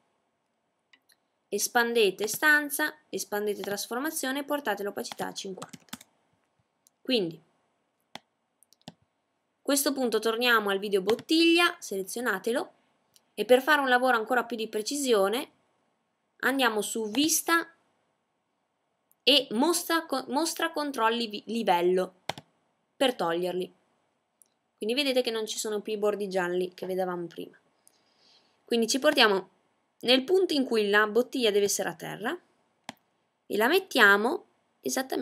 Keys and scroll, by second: 3.8-4.6 typing.